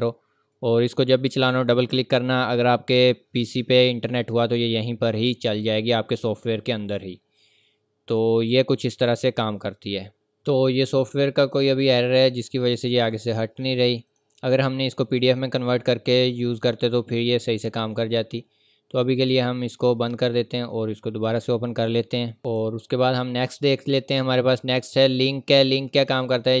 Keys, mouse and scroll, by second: 4.3 click, 7.8 scroll up 1, 8.2-8.5 scroll down 1, 8.5 scroll up 1, 8.9 scroll down 1, 9.1-9.4 scroll up 1, 9.4-10.1 scroll down 1, 10.1 scroll up 1, 10.2-11.4 scroll down 1, 11.4 click, 13.2-14.0 scroll down 1, 14.1 click, 14.5 scroll up 1, 14.9-16.0 scroll down 1, 16.8-17.5 scroll up 1, 17.5 click, 25.9 click.